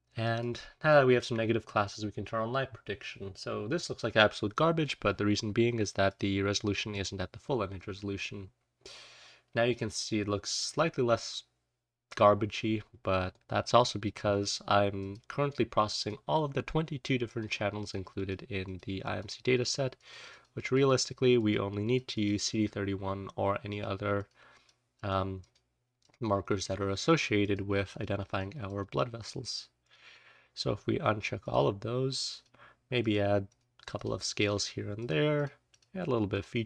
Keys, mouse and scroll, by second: 3.1-4.2 scroll up 1, 4.2-5.3 scroll up 1, 5.3-6.2 scroll up 1, 6.2-8.0 scroll up 1, 8.0-8.9 scroll up 1, 8.9-10.6 scroll up 1, 10.6-11.1 scroll up 1, 33.8-36.4 scroll up 1, 36.4-36.6 scroll up 1.